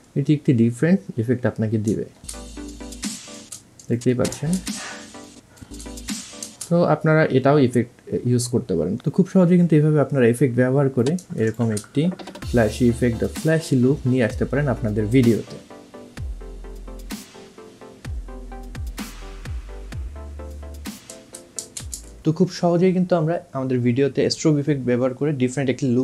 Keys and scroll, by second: 2.5 space, 9.0 ctrl+z, 13.1 space.